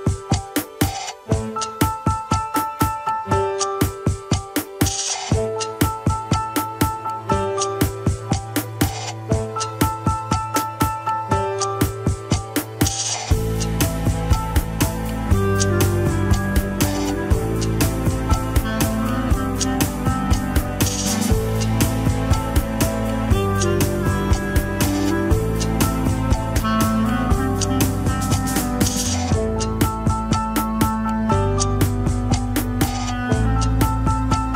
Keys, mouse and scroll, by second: 0.0 alt+z, 1.7-4.2 drag, 5.7-8.2 middle drag, 8.3 alt+z, 9.5 click, 10.1 alt+z, 11.3 click, 12.9-15.0 middle drag, 15.0 alt+z, 15.3 shift+middle click, 16.0 alt+z, 16.4-17.7 middle drag, 17.7 alt+z, 18.3-18.8 drag, 18.9 alt+z, 19.3 click, 22.3-23.9 middle drag, 23.9 scroll down 2, 25.8 ctrl+Tab, 26.3 n, 26.5 scroll up 2, 27.3-28.8 shift+middle drag, 28.8 KP_1, 29.1 scroll up 1, 29.5 Tab, 29.7 shift+middle click, 30.0 scroll up 1, 30.7 Tab, 31.4-31.9 drag, 32.1 n.